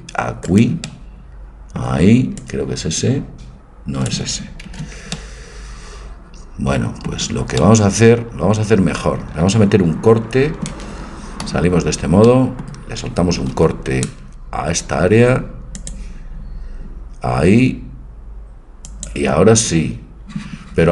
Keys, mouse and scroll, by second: 0.5-2.4 right drag, 0.9-2.5 drag, 2.5-4.2 drag, 4.8 ctrl+z, 5.2 click, 8.8-11.5 middle drag, 11.5 z, 12.3-13.6 middle drag, 13.6 ctrl+r.